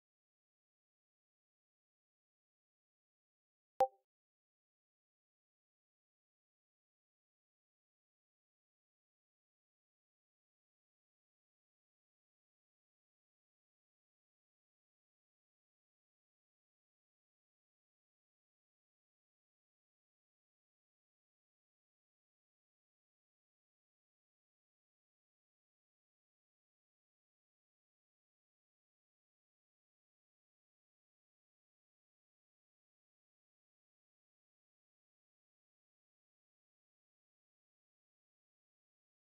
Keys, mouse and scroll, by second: 4.6 KP_7.